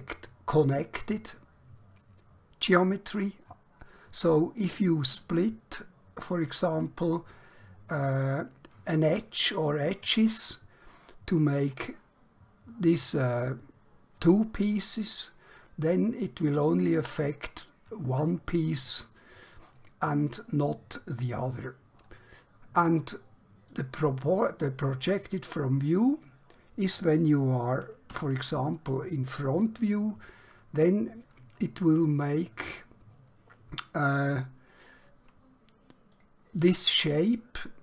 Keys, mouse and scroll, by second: 23.8 click, 28.1 KP_1, 32.3 middle click, 34.0 scroll down 1, 34.5 scroll up 1, 36.1 click.